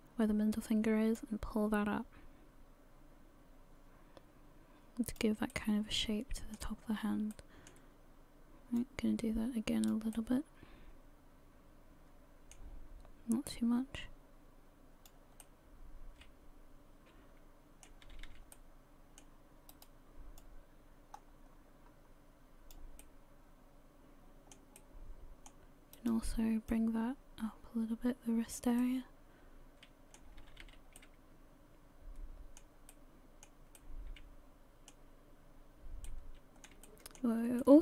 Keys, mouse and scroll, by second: 1.2 click, 5.4 scroll up 1, 5.5 middle click, 6.7-7.3 scroll down 2, 7.3 middle click, 8.8 click, 10.1 middle click, 13.5 click, 15.4 middle click, 16.7 middle click, 18.1 a, 18.3 a, 18.5 middle click, 20.4 right click, 20.4 click, 23.0 middle click, 24.8 middle click, 26.0 right click, 26.7 click, 28.8 middle click, 30.4 a, 30.6 a, 31.0 middle click, 33.7 middle click, 33.8 middle click, 36.1 middle click, 36.8 shift+middle click, 37.0 shift+middle click, 37.6 middle click.